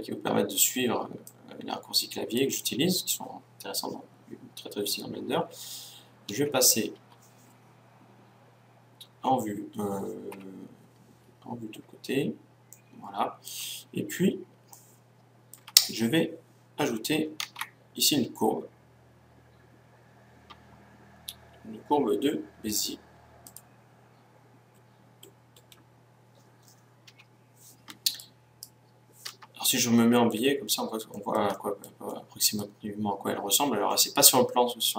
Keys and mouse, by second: 1.2-3.2 drag, 7.2 KP_1, 7.5 KP_3, 10.4 KP_1, 16.0-17.4 middle drag, 17.4 shift+a, 26.7-28.1 middle drag, 28.1-29.7 right drag, 29.7-33.8 middle drag, 34.7-34.9 middle drag.